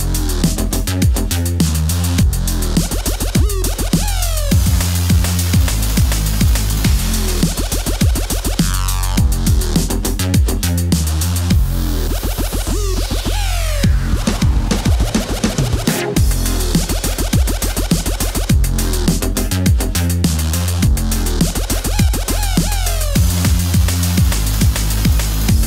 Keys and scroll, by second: 0.2 shift+super+z, 2.9 super+z, 4.0 super+z, 5.8-6.7 typing, 9.3 KP_5, 10.8-11.5 typing, 16.0 d, 16.4 d.